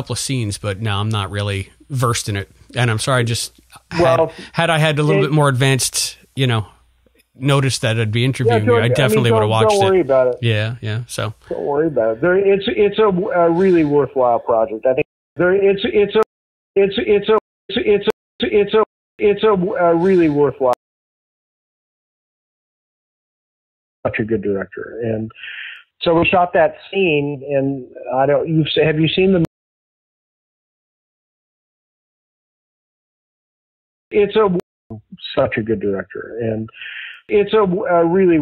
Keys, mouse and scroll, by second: 2.3 click, 7.7-10.2 drag, 10.6 click, 14.9-19.1 typing, 15.1 click, 16.6 click, 17.5 click, 18.2 click, 19.0 click, 19.8-20.8 drag, 20.7 space, 23.9 space, 24.5-30.7 drag, 29.3 space, 29.9 s, 31.2 s, 31.6-32.8 drag, 33.4 ctrl+shift+Delete, 34.0 space, 34.5 space, 34.7 click, 34.8 space.